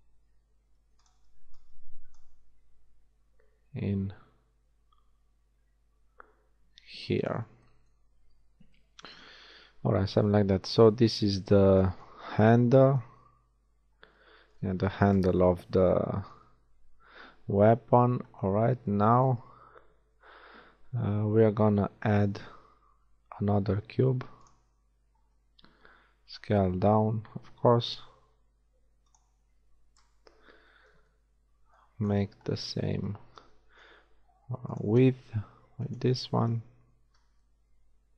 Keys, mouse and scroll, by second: 1.2 a, 1.4 b, 2.3 g, 8.2 shift+a, 15.1 KP_1, 22.0 shift+a, 25.9 s, 28.1 g, 30.0 KP_3, 33.3 s, 36.5 KP_1.